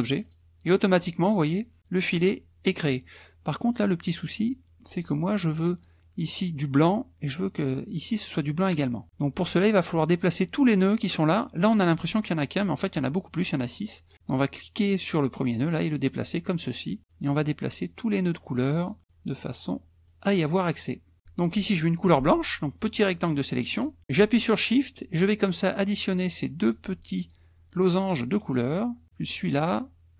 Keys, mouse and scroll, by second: 0.1 click, 4.8 click, 14.6-16.4 drag, 16.8 click, 17.4 click, 18.4 click, 20.0 click, 21.5-24.0 drag, 25.2 shift+click, 26.6 shift+click, 29.2 shift+click.